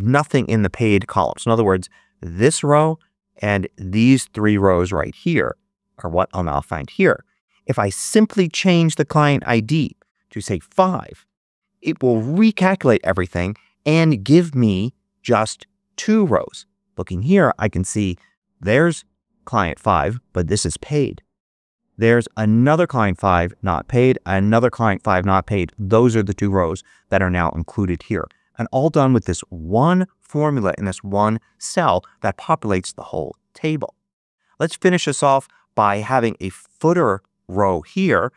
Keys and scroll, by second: 10.6 5, 12.2 Return.